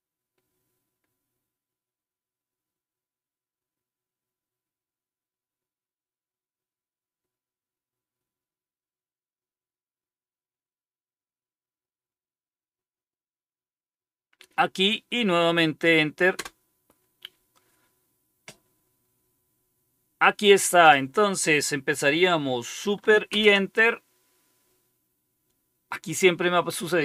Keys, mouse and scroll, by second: 16.3 Return, 23.2 super+Return.